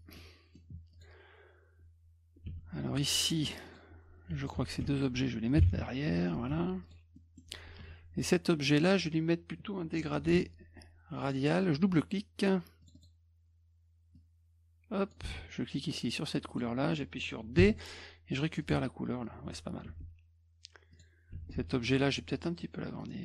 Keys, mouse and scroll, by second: 0.1 middle click, 0.9 click, 2.5 F2, 3.7 click, 4.4 shift+click, 4.8 F1, 6.5 F2, 6.8 click, 7.1 middle drag, 7.8 F2, 8.6 click, 10.2 g, 11.2 click, 12.8 click, 12.9 click, 14.1 click, 16.5 click, 17.6 d, 18.6 click, 19.8 F2, 20.9 click, 22.6 click.